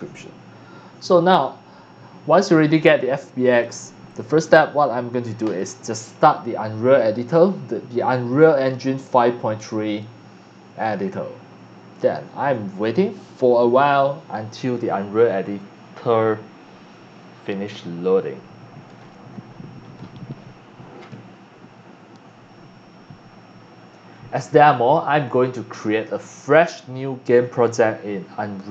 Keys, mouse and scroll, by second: 3.5 click, 4.0 click, 5.4 click.